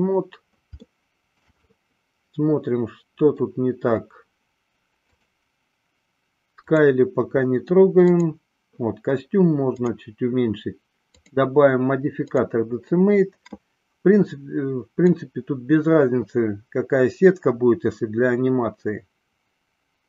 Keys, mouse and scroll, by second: 1.0-1.7 shift+middle drag, 1.8-3.7 middle drag, 5.1 click, 6.8 click, 8.2 click, 11.4-12.6 drag, 15.3-20.0 drag.